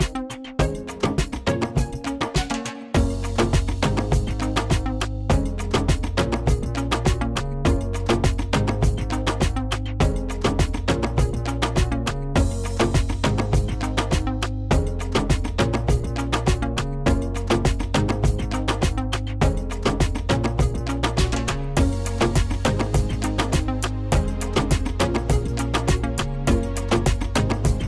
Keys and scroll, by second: 2.8 ctrl+z, 9.8 ctrl+z, 16.1 Delete.